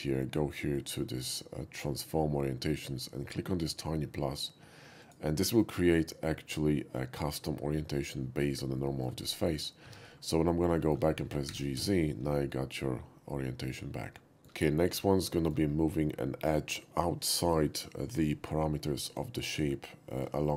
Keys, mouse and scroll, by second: 0.7 shift+click, 5.0 click, 8.7 middle click, 9.8 middle click, 9.8 Tab, 10.5 middle click, 10.8 shift+middle click, 11.5 g, 11.7 z, 11.9 g, 14.4 shift+middle click, 15.4 shift+middle click, 19.9 shift+middle click, 20.4-20.5 shift+middle drag.